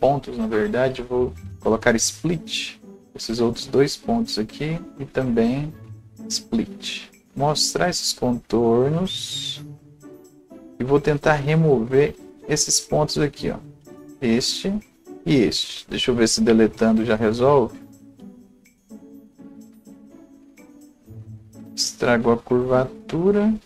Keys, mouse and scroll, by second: 12.4 scroll up 1, 13.1 click, 15.0 click, 16.6 Delete, 19.1 click, 19.7 Delete, 21.6 click, 22.4 c, 23.0-23.6 drag.